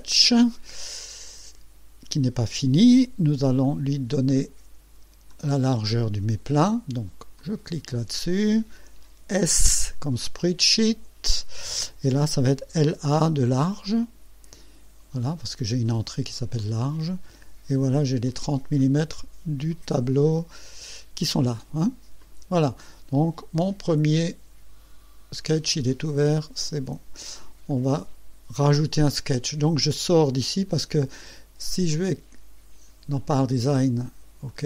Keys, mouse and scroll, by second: 0.6 scroll up 1, 3.6 click, 5.3 click, 7.4 click, 9.5 s, 10.2 click, 12.7 l, 13.1 a, 14.0 click, 15.3 click, 16.6 click, 18.3-18.9 drag, 19.7 click, 22.2 click, 26.6 click, 27.4-27.7 scroll down 1, 31.9 click, 33.1 click, 34.5 click.